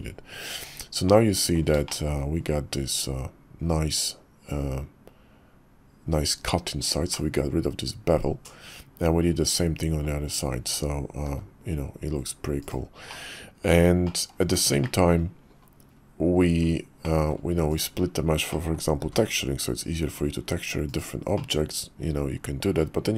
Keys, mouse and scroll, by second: 0.5 Tab, 1.1 click, 1.8 shift+middle drag, 2.4 KP_5, 7.1-10.0 middle drag, 11.3 g, 13.1-13.7 middle drag, 14.0 middle click, 14.8 shift+drag, 17.0 middle click, 17.7 click, 18.6 middle click, 19.0 g, 21.3-21.9 drag, 21.9 middle click.